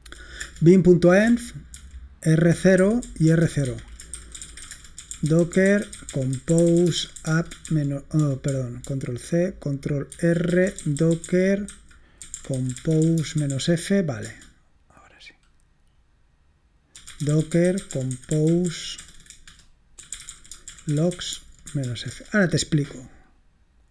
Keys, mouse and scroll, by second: 0.4 Return, 1.3-14.9 typing, 10.2 ctrl+r, 16.8-22.4 typing.